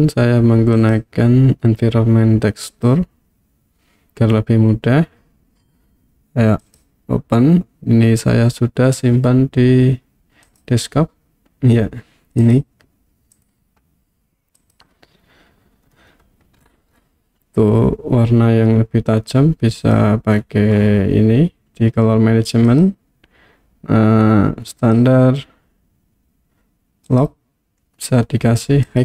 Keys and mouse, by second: 0.9-3.1 drag, 6.6 click, 19.9 click, 22.7-25.1 drag, 27.1-29.0 drag.